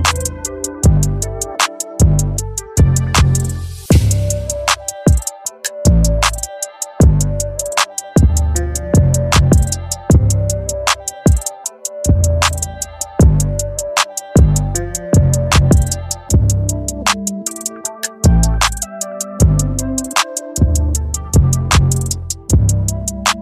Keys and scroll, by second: 1.4 space, 2.9 space, 4.7 space, 5.7 space, 9.6 space, 10.3 ctrl+z, 10.6 space, 12.9 ctrl+z, 13.4 space, 14.8 ctrl+z, 15.2 space, 16.1 space, 18.7 space, 19.7 space, 20.3 ctrl+z, 21.1 space.